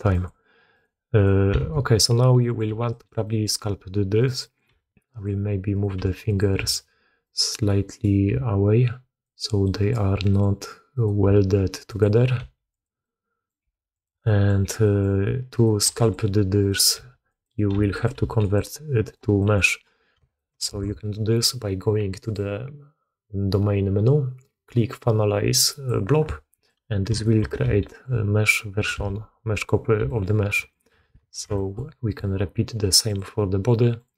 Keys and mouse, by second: 0.7 click, 1.1 click, 1.6 alt+s, 2.3 click, 2.6 g, 3.2 drag, 4.1 click, 4.3 click, 4.7 g, 5.7 click, 7.4 click, 7.8 click, 8.2 g, 9.6 drag, 10.2 click, 10.9-12.3 drag, 12.3 r, 13.0-13.4 drag, 13.5 r, 14.1-14.4 drag, 14.8 drag, 15.5 click, 15.8 g, 16.5 click, 16.9 r, 17.6 r, 18.2 g, 19.0-19.5 drag, 20.1 shift+middle click, 20.3 shift+drag, 20.6 alt+a, 22.2-26.1 drag, 26.4 click, 27.1 shift+middle drag, 27.5 g, 29.9 g, 31.1 alt+a, 31.5 shift+drag, 32.0 click, 33.3-34.1 drag.